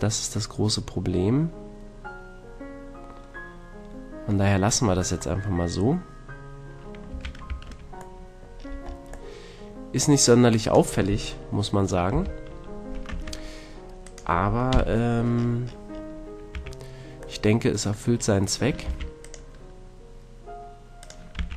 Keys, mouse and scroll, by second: 0.3 middle click, 5.4-7.5 middle drag, 7.1 a, 7.5 Tab, 8.1-10.5 middle drag, 12.1 KP_Decimal, 13.1 Tab, 14.7 KP_Decimal, 16.5 a, 18.8 ctrl+r, 21.0-21.5 drag, 21.3 a.